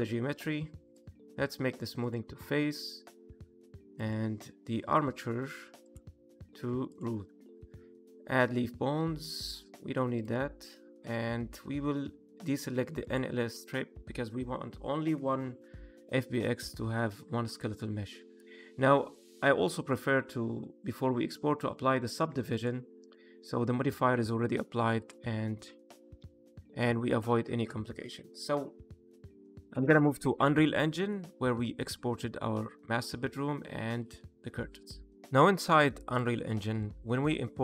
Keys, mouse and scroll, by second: 20.8 click, 22.4 click, 24.9 click, 27.0 click, 27.9 middle click, 31.2 middle click, 34.8 click.